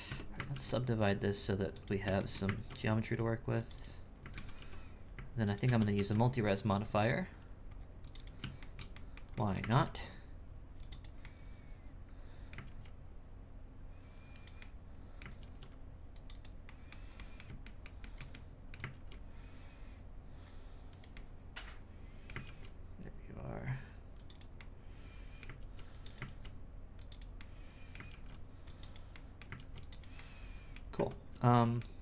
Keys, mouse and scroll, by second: 0.1 Tab, 0.5 ctrl+r, 1.7 right click, 2.1 shift+middle click, 2.5 ctrl+r, 3.7 right click, 4.3 ctrl+z, 8.1 right click, 8.6-9.7 shift+middle drag, 9.7 ctrl+r, 10.9 right click, 11.2-12.6 middle drag, 12.6 ctrl+r, 14.6 middle click, 15.4 ctrl+r, 16.3 right click, 16.6-18.9 middle drag, 18.9 ctrl+r, 21.1-22.4 middle drag, 22.4 ctrl+r, 24.3 right click, 24.5-25.6 middle drag, 25.6 ctrl+r, 26.0 right click, 26.2 ctrl+r, 27.1 right click, 27.3 middle click, 28.1 ctrl+r, 28.8 right click, 29.1 middle click, 29.6 ctrl+r, 29.9 right click, 30.1 middle click, 30.8-31.7 scroll down 3, 30.9 Tab, 31.7 middle click.